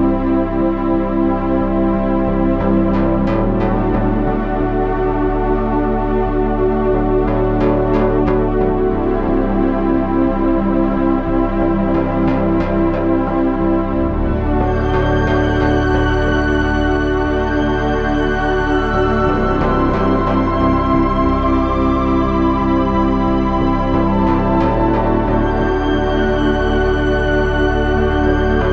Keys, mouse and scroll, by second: 0.3 z, 1.0 z, 5.8 KP_3, 6.2 z, 8.2 ctrl+r, 13.9 g, 16.2 g, 20.5 z, 22.6 KP_3, 23.1 z, 25.2 g.